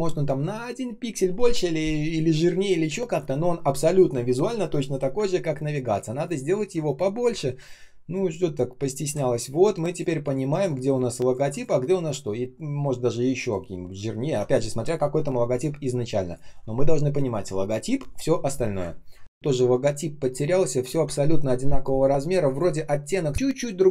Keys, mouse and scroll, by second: 5.2 ctrl+scroll down 1, 6.1 ctrl+click, 6.4-7.2 ctrl+scroll up 1, 7.2 л, 8.0 shift+click, 9.8 shift+click, 10.1 shift+click, 11.7 ctrl+scroll down 1, 13.3 ctrl+click, 15.6 space, 16.1 space, 16.1 space, 19.1 ctrl+click.